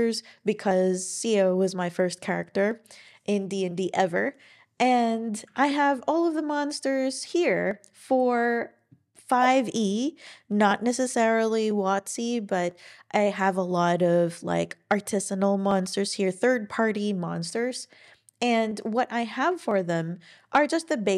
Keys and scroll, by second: 5.5 ctrl+super+l.